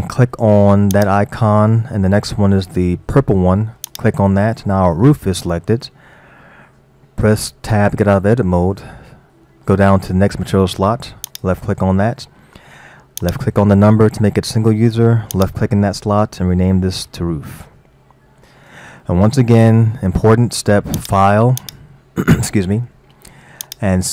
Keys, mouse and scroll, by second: 1.0-4.0 drag, 7.7 Tab, 8.9-10.0 scroll down 2, 11.3 click, 13.2 click, 15.4-18.0 drag, 18.0 o, 21.0 click, 21.6-24.1 drag.